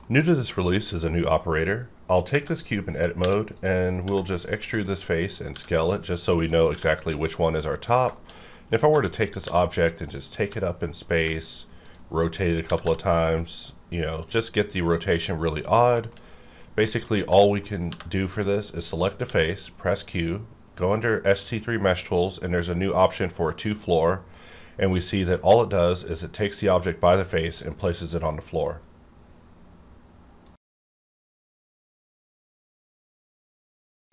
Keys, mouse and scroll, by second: 1.1 middle click, 1.1 middle click, 2.3 Tab, 3.2-6.2 typing, 3.5 click, 3.5 click, 4.4 click, 5.2 click, 5.9 click, 6.5 click, 6.7 Tab, 7.5 scroll down 1, 8.1 shift+middle click, 8.5-8.9 scroll down 1, 8.9-12.8 typing, 9.2 click, 10.0 click, 11.8 click, 12.6 scroll down 1, 15.1 click, 15.4-16.2 scroll down 3, 16.2 shift+middle click, 16.7-17.3 scroll down 2, 16.8 shift+middle click, 17.3 Tab, 17.4 middle click, 17.7 scroll up 1, 17.9 3, 18.3 click, 19.2 q, 23.6 click, 24.3 KP_Decimal, 24.7-25.1 scroll down 1, 25.4-30.5 middle drag.